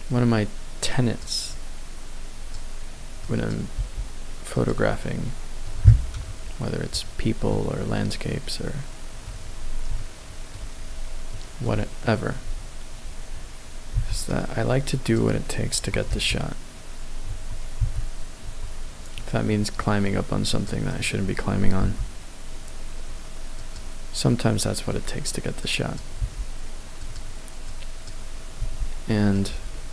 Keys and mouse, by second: 0.8 click, 1.6-2.5 drag, 3.3 click, 3.7 g, 4.6 click, 4.8-6.1 middle drag, 6.1 KP_1, 7.5 middle click, 8.3 middle click, 9.9 shift+middle click, 11.3 middle click, 13.9 c, 15.7 Tab, 16.1 g, 17.3 Tab, 17.8 g, 18.4 Tab, 19.4 middle click, 20.5 click, 21.0 right click, 21.8 g, 23.6 click, 24.2 middle click, 25.6 click, 26.2 g, 27.1 click, 27.7 click, 28.5 g, 29.3 click.